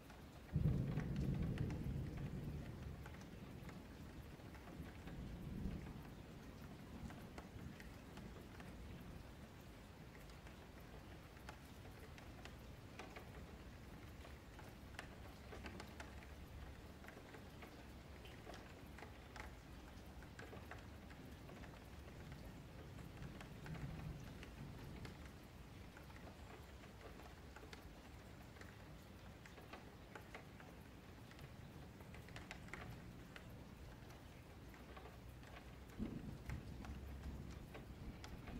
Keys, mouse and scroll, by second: 0.2 g, 1.1-2.5 middle drag, 2.5 click, 2.9 g, 3.5-5.4 middle drag, 5.4-5.8 scroll down 4, 5.8 scroll up 3, 6.1 Tab, 6.3 click, 6.6 shift+middle click, 7.4 click, 10.5 scroll down 2, 10.7-11.6 middle drag, 11.6-12.0 scroll up 2, 12.0-13.5 shift+middle drag, 13.5 a, 13.7 a, 14.1-15.0 scroll down 1, 15.0-15.8 middle drag, 15.8 click, 16.1 Tab, 16.9 middle click, 17.7 KP_Divide, 18.0 middle click, 18.9 1, 19.0 click, 19.6 middle click, 20.0 scroll up 4, 20.3 middle click, 20.7 2, 20.9 click, 21.2 middle click, 21.7 2, 22.0 click, 22.3 q, 23.2-24.5 middle drag, 24.5 1, 24.9 click, 28.0 ,, 29.5 click, 30.6-31.6 middle drag, 31.6 KP_Divide, 32.7 ctrl+z, 33.4 middle click, 33.8 ctrl+z, 35.1 middle click, 35.6 3, 36.0 click, 36.5 q, 37.2 scroll down 2, 37.4 1.